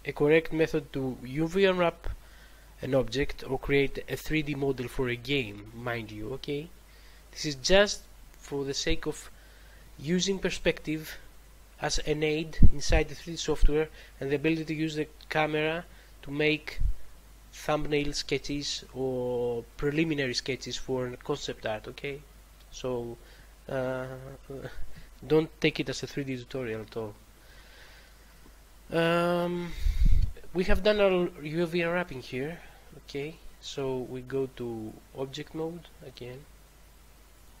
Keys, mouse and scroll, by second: 34.7 click, 37.2 click.